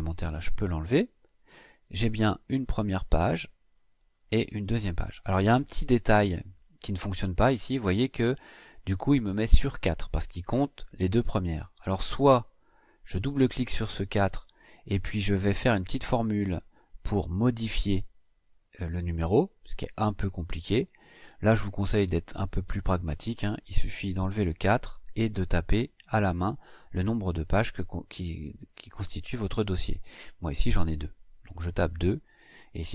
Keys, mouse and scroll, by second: 0.1 Delete, 1.0-1.4 scroll down 1, 1.6-2.2 scroll down 2, 2.4-3.2 scroll down 4, 3.4-4.9 scroll down 6, 5.3-6.6 scroll up 6, 8.3 click, 12.9 click, 20.9 click, 22.6 click, 24.2 BackSpace, 30.7 KP_2, 32.7-32.9 scroll down 8.